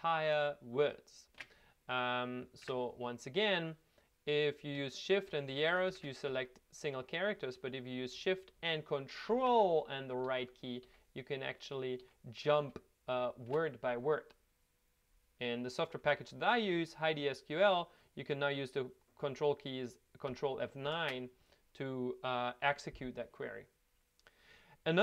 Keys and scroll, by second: 2.6 Home, 5.1 Home, 5.3 shift+Right, 5.5 shift+Right, 5.7 shift+Right, 5.9 shift+Right, 10.2 ctrl+shift+Right, 10.8 ctrl+shift+Right, 12.0 ctrl+shift+Right, 12.6 ctrl+shift+Right, 13.1 ctrl+shift+Right, 20.8 ctrl+F9.